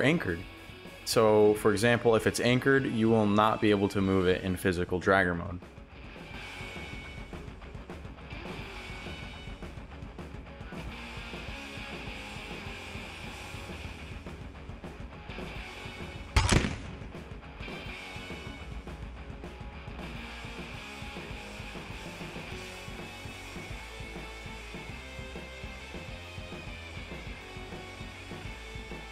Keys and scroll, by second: 0.0-0.4 typing, 2.1 shift+d, 4.7 shift+d, 9.2 ctrl+z.